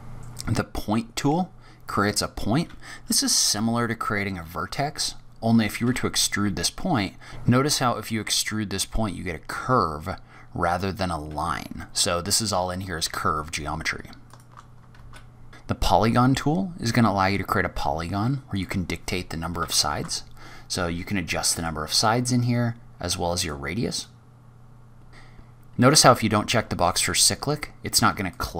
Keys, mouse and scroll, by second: 0.5-2.0 scroll up 7, 5.1-5.7 scroll down 3, 5.7 e, 8.0 e, 10.6-11.1 scroll down 4, 11.3-13.7 scroll up 3, 14.5 shift+Tab, 14.5 shift+right click, 14.5 scroll down 4, 14.6 shift+a, 15.9-16.6 scroll up 5, 18.5 click, 21.9 click, 23.9 click, 25.1 click, 25.1-26.0 scroll down 1, 28.1 click.